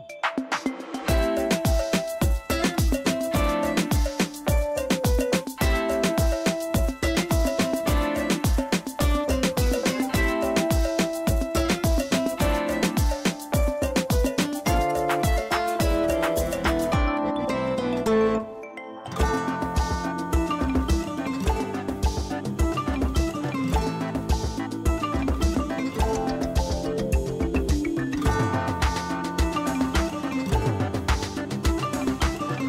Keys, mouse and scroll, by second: 4.6 alt+click, 13.8 click, 16.1 click, 16.4 space, 16.5 right click, 16.7 click, 16.7 click, 17.3 ctrl+d, 17.7 ctrl+space, 18.0 ctrl+click, 18.2 ctrl+space, 18.3 ctrl+space, 19.8 click, 23.8 space, 24.3 right click, 24.3 space, 24.5 click, 24.6 space, 28.4 space, 29.0-29.7 ctrl+drag, 31.8 alt+t, 32.0-32.6 typing.